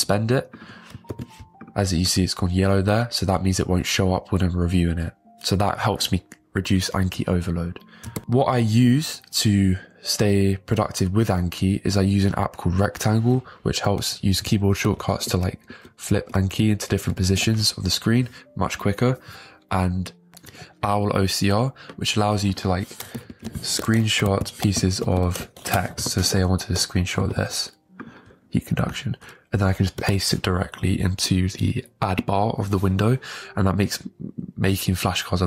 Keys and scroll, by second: 1.1 super+j, 15.0 ctrl+Home, 15.3 ctrl+End, 15.7 ctrl+Home, 16.6 ctrl+End, 17.0 ctrl+Page_Up, 23.3 ctrl+Home, 24.2 a, 24.8 ctrl+End, 27.2 super+g, 30.0 super+v.